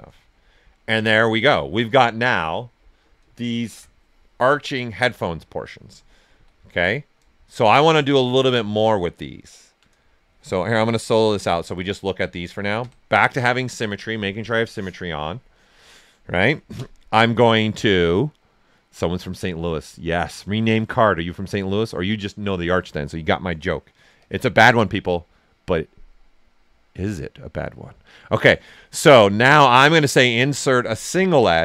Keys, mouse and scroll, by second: 0.8 alt+right click, 3.6 shift+f, 5.2 alt+right click, 8.5 shift+f, 9.2-10.8 alt+right drag, 10.8 click, 11.2 shift+f, 11.6 alt+right click, 12.7 ctrl+x, 16.7 ctrl+space, 24.1 ctrl+click, 24.8 space, 30.9 ctrl+click.